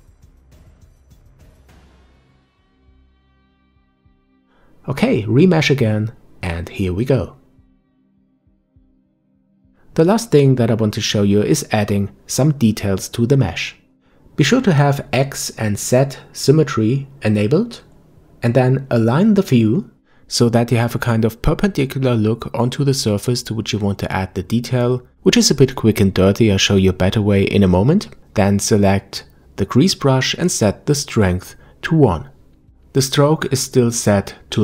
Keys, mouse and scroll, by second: 0.4-1.4 shift+drag, 1.6 middle click, 2.0 shift+click, 3.0 scroll down 4, 3.2-4.2 middle drag, 4.3-6.7 drag, 7.0 middle click, 7.7-8.2 scroll up 5, 8.2-8.6 scroll down 1, 8.6 shift+click, 9.5-10.0 scroll down 2, 10.0-11.0 middle drag, 11.0-12.0 scroll up 1, 18.5-21.2 middle drag, 21.2-22.0 scroll up 1, 22.0-27.1 shift+middle drag, 28.4 click, 29.5-32.5 drag, 32.6-34.6 drag.